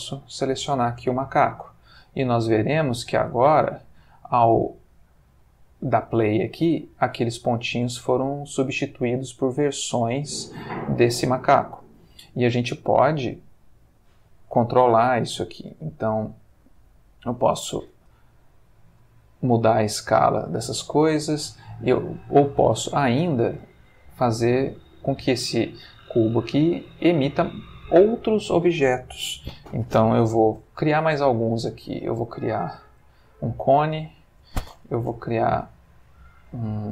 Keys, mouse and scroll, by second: 0.0 click, 0.6 space, 1.6-2.5 ctrl+middle drag, 2.7-3.5 ctrl+shift+middle drag, 3.8 ctrl+middle click, 8.3-9.6 ctrl+middle drag, 9.9 ctrl+shift+middle click, 12.0 Escape, 13.3-14.5 middle drag, 17.3 click, 17.9 space, 21.3 click, 23.1 Escape, 23.8 shift+click, 24.8-25.3 middle drag, 29.9 click, 30.4 shift+a, 33.2 click, 33.7 g, 34.3 click, 35.0 shift+a.